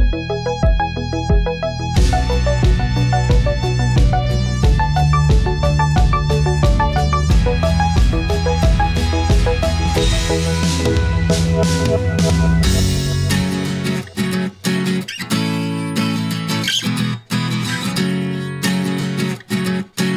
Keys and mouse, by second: 1.5-3.4 middle drag, 4.6 Tab, 6.3 click, 7.4 ctrl+r, 10.0 click, 10.8 KP_1, 12.3 shift+middle click, 16.2 click, 18.1-19.7 drag.